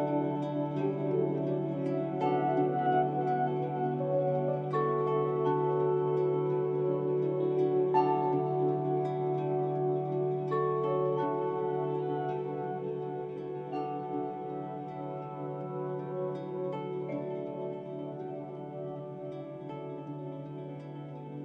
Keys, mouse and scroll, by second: 0.1-0.8 typing, 0.3 click, 2.0-3.7 typing, 5.5-7.6 typing, 7.1 scroll down 1, 10.1-10.8 typing, 10.9-21.4 drag, 16.2-17.0 typing.